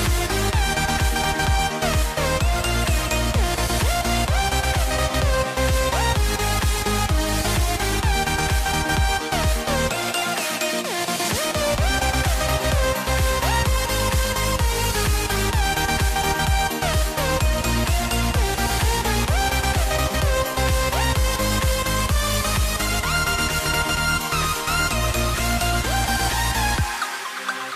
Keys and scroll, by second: 5.0 BackSpace, 9.7 i, 10.4 v, 11.6 i, 12.8 v, 14.5 i, 15.1 v, 16.8 i, 17.3 v, 18.7 i, 20.0 super+z, 20.5 v, 21.8 BackSpace, 24.6 i, 24.9 v, 26.0 BackSpace.